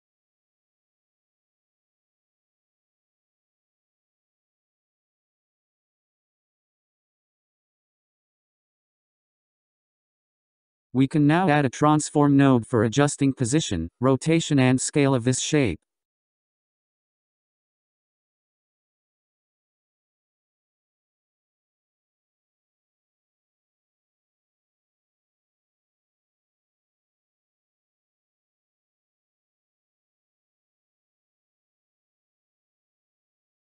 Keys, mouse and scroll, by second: 5.7-8.9 drag, 10.9-12.2 scroll down 10, 12.2-12.5 scroll up 7, 13.2-13.8 drag, 16.6 shift+a, 23.9-24.6 scroll up 11, 25.9-29.1 drag, 29.1-33.6 drag.